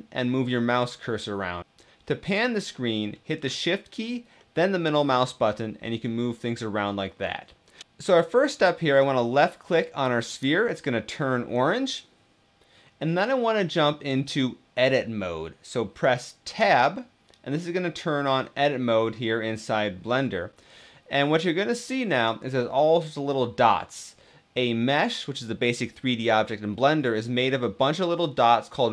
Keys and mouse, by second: 4.2-7.5 shift+middle drag, 10.0 click, 16.6 Tab.